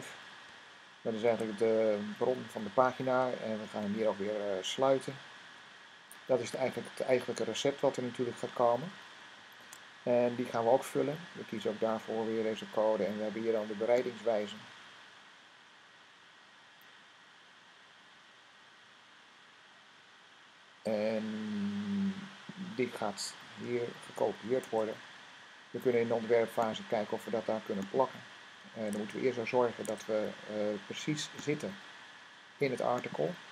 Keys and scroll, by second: 1.1 >, 3.5 <, 4.6 /, 9.5 Tab, 23.9 c, 24.5 Tab, 28.8 Tab, 29.7 super+Tab, 29.8 super+Tab.